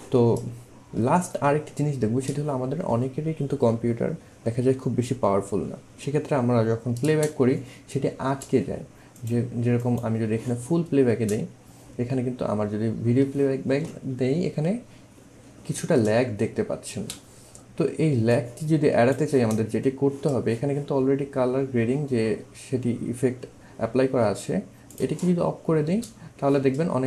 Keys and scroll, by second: 7.1 space, 11.1 space, 17.0 space, 25.9 space.